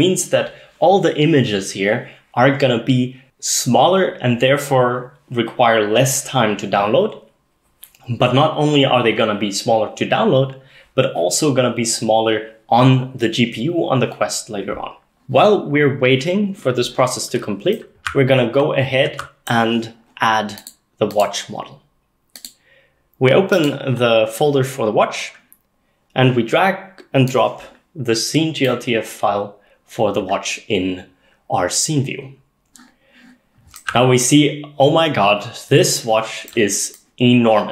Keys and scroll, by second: 18.1-18.6 s, 18.6-19.1 d, 33.9-36.5 a.